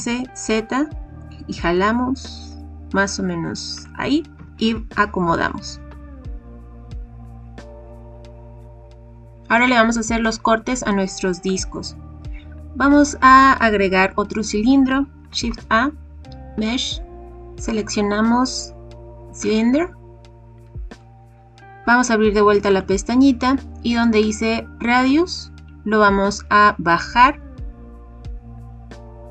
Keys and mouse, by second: 3.7 click, 4.3 g, 4.3 z, 8.1 click, 8.6 click, 15.4 shift+a, 22.6 click, 24.9-29.3 drag.